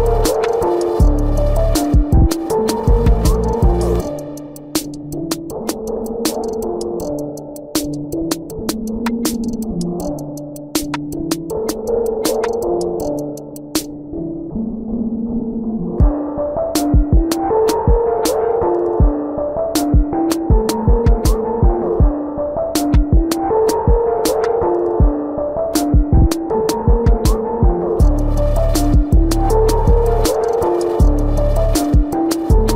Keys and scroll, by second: 3.4 ctrl+alt+z, 4.9 ctrl+alt+z, 16.6 space, 20.6 space, 26.9 space, 32.1 space.